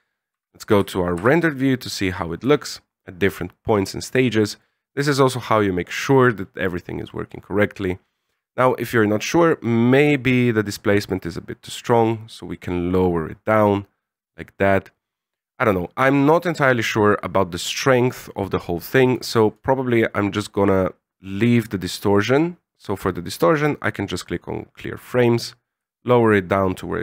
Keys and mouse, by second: 0.3 shift+z, 1.6 shift+z, 2.4 a, 4.4 click, 7.7 click, 10.0-15.4 shift+drag, 21.3-24.3 right drag, 25.4-27.0 drag.